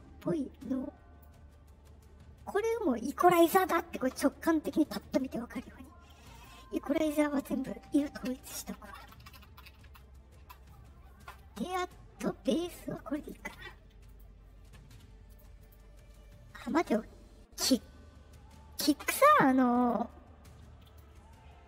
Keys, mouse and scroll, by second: 4.9 click, 6.3 click, 13.1 click, 14.0 click, 15.2 click, 15.5 click, 18.8 scroll up 2, 19.7 click, 20.8 click.